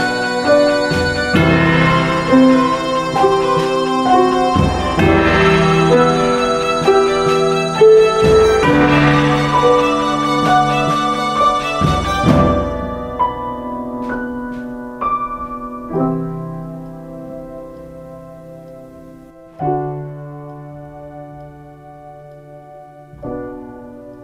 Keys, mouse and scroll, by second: 0.9 ctrl+space, 1.6 space, 2.3 ctrl+space, 2.8 space, 16.9 ctrl+space.